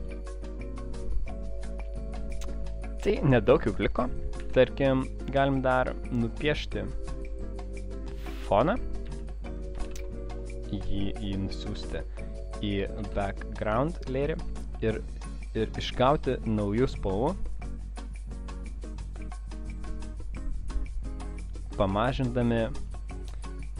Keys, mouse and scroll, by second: 0.2 space, 0.3 click, 3.8 click, 4.6 m, 6.4 click, 8.2 click, 9.1 v, 9.9 ctrl+shift+[, 11.8 ctrl+x, 13.0 ctrl+shift+v, 14.3 click, 16.6 click, 18.4 click, 21.4 click, 22.3 click, 22.7 click.